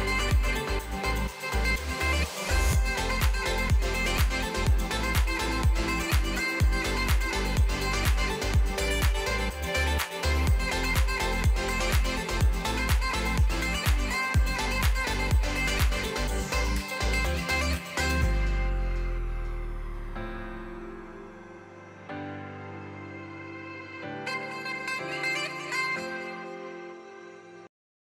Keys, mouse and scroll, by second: 0.1 Right, 0.3-0.8 BackSpace, 2.1 g, 2.7 scroll down 1, 3.0 Left, 3.3 Left, 3.7 Left, 4.3 Left, 4.3 click, 4.8 Left, 4.8 click, 5.2 Left, 5.2 click, 5.2 Left, 5.7 BackSpace, 5.8 BackSpace, 7.4 scroll down 1, 7.6-8.7 middle drag, 9.6 click, 10.1 click, 11.6 click, 11.8 scroll up 1, 12.3 middle click, 12.6-13.1 scroll down 1, 13.1-14.1 shift+middle drag, 14.1 click, 15.0 click.